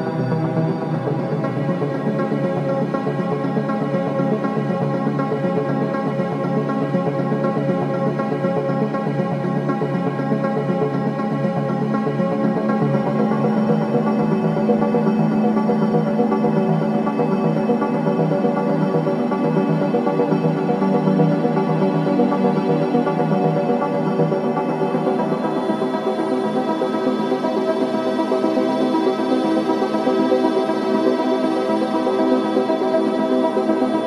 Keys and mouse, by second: 2.9 g, 3.3 x, 4.7 click, 5.7-6.9 typing, 8.0-13.0 drag, 14.1 typing, 14.2-15.1 drag, 15.3 click, 16.5-16.8 typing, 19.0 shift+click, 20.0 click, 20.2 typing, 21.7-26.4 typing, 22.0 click, 23.9 click, 26.4-29.5 drag, 27.6 typing, 29.2 typing, 30.9-31.6 typing, 31.2 click, 32.9-33.8 typing, 33.3 click.